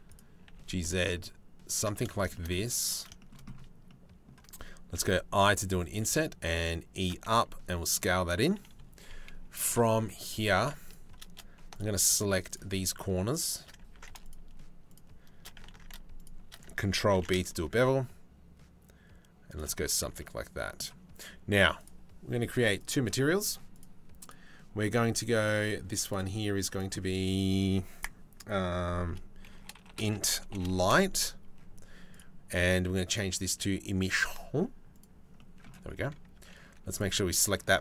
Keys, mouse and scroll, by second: 0.1 g, 1.5 click, 1.9 shift+click, 2.2 3, 2.4 click, 2.8 shift+click, 3.5 click, 4.6 i, 5.6 e, 6.9 s, 10.0 2, 11.3 alt+click, 12.8 alt+shift+right click, 13.0 alt+shift+click, 13.5 ctrl+z, 13.8 alt+shift+click, 14.5 alt+shift+click, 15.3 ctrl+z, 15.7 alt+shift+click, 16.7 ctrl+b, 19.7 Tab, 22.4 click, 23.4 click, 23.8 click, 25.0 click, 25.2 click, 25.7 click, 26.3-28.8 drag, 29.3 click, 29.9 click, 32.7-34.6 drag, 35.0 click, 35.9 Tab, 36.2 3, 36.5-37.8 drag.